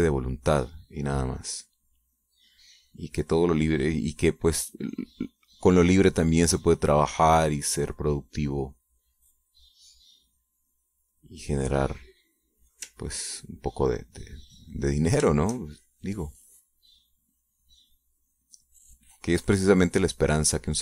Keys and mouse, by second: 3.7-11.1 drag, 11.2-12.6 middle drag, 12.7 middle click, 14.0 ctrl+click, 14.6-20.8 ctrl+drag.